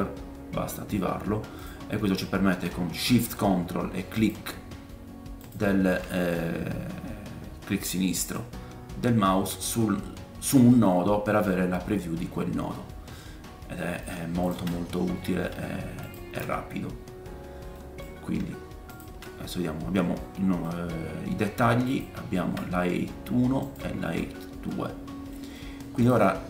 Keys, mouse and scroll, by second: 4.2 ctrl+shift+middle click, 4.2 ctrl+shift+right click, 5.4 ctrl+shift+middle click, 5.4 ctrl+shift+right click, 7.7 middle click, 8.6-9.4 scroll up 3, 13.8 middle click, 14.8 ctrl+shift+click, 15.1 middle click, 16.5 ctrl+shift+click, 17.2 scroll down 3, 17.7-19.2 drag, 17.7 middle click, 18.2 scroll up 2, 20.2 middle click, 22.1 ctrl+shift+click, 23.6 ctrl+shift+click, 24.7 middle click, 25.5 middle click.